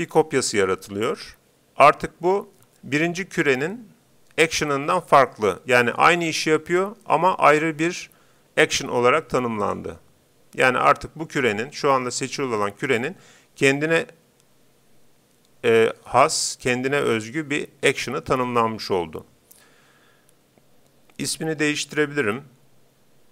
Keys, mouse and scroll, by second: 9.6-11.4 drag.